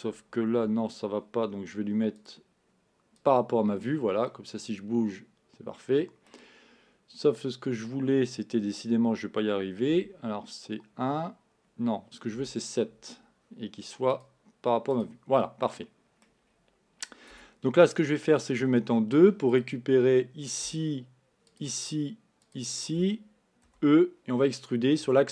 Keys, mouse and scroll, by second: 0.7 KP_1, 2.4-4.5 drag, 4.5-7.4 middle drag, 10.4 KP_1, 12.4 KP_7, 14.1-15.4 drag, 15.4-16.5 middle drag, 16.5-17.3 scroll up 1, 17.3 Tab, 18.8 2, 19.6 click, 21.5 shift+click, 22.5 shift+click, 23.7 e.